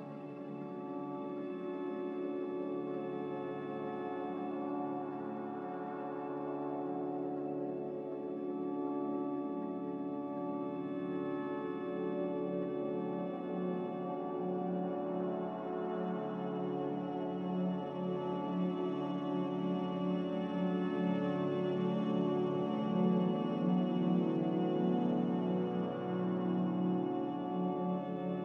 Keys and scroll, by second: 3.9 typing, 5.8 typing, 10.3 z, 23.8-24.5 typing, 27.8-28.4 typing.